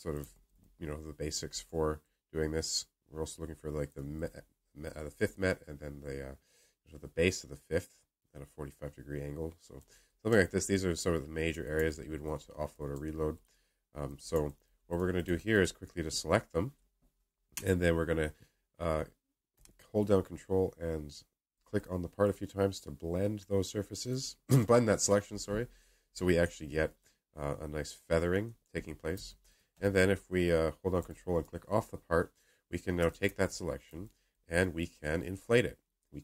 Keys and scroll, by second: 14.2-14.9 alt+space, 15.2 alt+space.